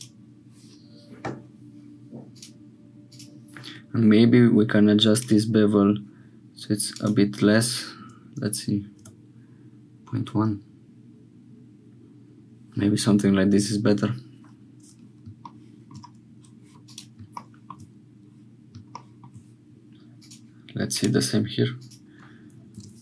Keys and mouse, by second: 5.2-12.5 drag, 15.6 shift+click, 16.9 click, 17.5 shift+click, 18.9 shift+click, 20.2 click, 21.0-23.0 drag.